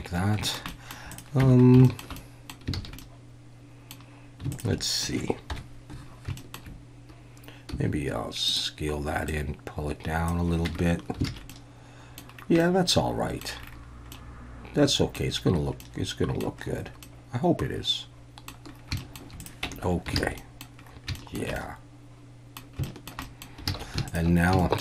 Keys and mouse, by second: 0.5 shift+middle click, 0.7 middle click, 1.4 Tab, 1.8 shift+middle click, 2.2 middle click, 2.7 alt+a, 3.0 middle click, 5.5 KP_1, 6.4 shift+middle click, 7.7 s, 8.5 click, 9.3-10.3 drag, 10.7 Tab, 11.3 alt+a, 11.5-12.2 middle drag, 12.6-13.4 middle drag, 14.1-15.2 middle drag, 15.8-16.4 middle drag, 17.0-18.5 middle drag, 19.0 shift+middle click, 19.6 Tab, 20.2 alt+a, 20.4 click, 21.2 shift+click, 21.4 shift+middle drag, 21.6-22.6 drag, 22.8 shift+click, 23.2 middle click, 23.7 alt+a, 24.1 alt+shift+drag, 24.6 shift+middle drag.